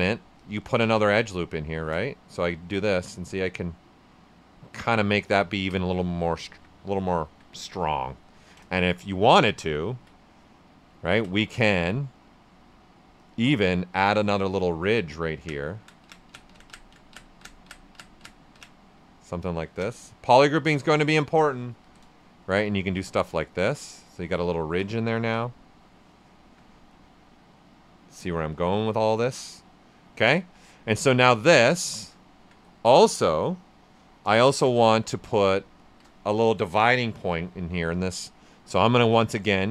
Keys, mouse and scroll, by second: 0.3 click, 1.6 space, 2.4-4.9 drag, 4.9 right click, 5.2 ctrl+right click, 6.4 alt+right click, 7.1 alt+right click, 8.1 right click, 8.4 ctrl+right click, 8.7 shift+f, 9.0 shift+right click, 9.4 shift+d, 9.7 ctrl+right click, 10.6 right click, 12.2 space, 14.2-21.8 drag, 21.8 d, 22.2 shift+f, 22.7 ctrl+right click, 22.9-24.2 right drag, 24.2 alt+right click, 24.8 right click, 25.1 alt+right click, 25.4 right click, 26.3 alt+right click, 29.2 alt+right click, 29.5 ctrl+alt+right click, 30.3 ctrl+alt+right click, 30.7 right click, 31.0 alt+right click, 31.5 ctrl+right click, 34.4 shift+f, 34.8 ctrl+right click, 35.8 shift+d, 38.9 space.